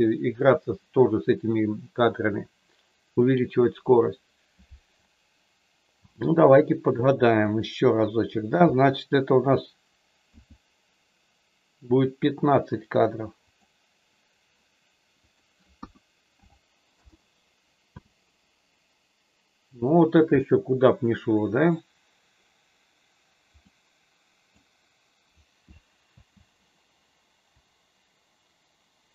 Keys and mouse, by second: 6.1 space, 7.5 click, 10.2 s, 13.5 click, 15.2-17.2 drag, 17.8 space, 23.6 middle click, 26.2 space, 27.6-29.1 drag.